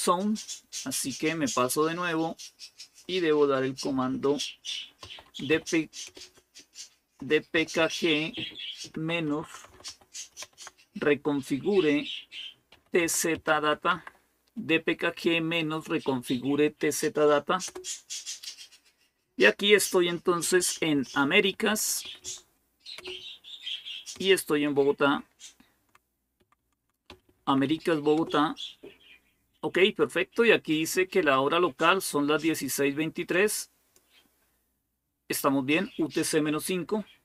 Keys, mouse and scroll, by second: 1.9 click, 2.5 click, 4.6-10.6 typing, 12.3-14.2 typing, 15.5-16.2 typing, 17.4 Return, 20.4 Up, 20.5 Up, 20.7 Up, 20.9 Up, 21.1 Up, 21.5 Up, 21.7 Up, 21.8 Up, 22.0 Up, 22.8 Return, 23.9-25.6 Down, 25.9 Down, 26.2 Down, 26.4 Down, 26.6 Down, 26.9 Up, 27.0 Up, 27.2 Up, 27.4 Up, 28.0 Return, 33.1 click.